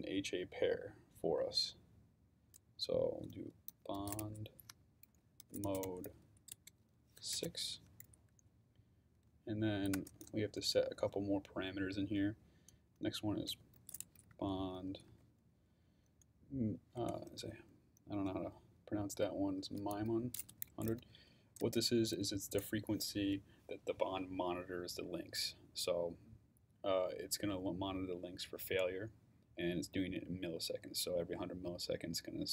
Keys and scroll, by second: 3.5-7.3 typing, 9.9 Return, 13.3-15.6 typing, 17.0 BackSpace, 17.4 i, 19.3-21.6 typing.